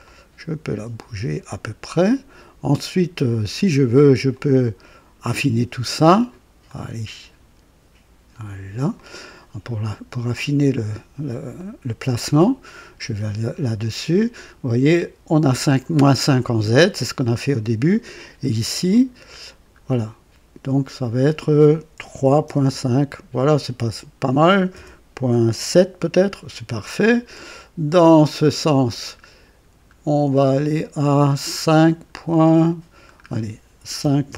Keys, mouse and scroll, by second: 4.2 click, 6.6 click, 8.9 click, 11.5 click, 12.4 click, 18.8 click, 19.5 scroll down 1, 20.8 scroll up 2, 22.1 KP_3, 22.4 KP_Decimal, 22.6 KP_5, 24.7 BackSpace, 25.6 KP_7, 27.9 click, 29.6 scroll down 1, 31.9 scroll up 1, 32.8 scroll down 1, 33.9 KP_5, 34.2 KP_Decimal.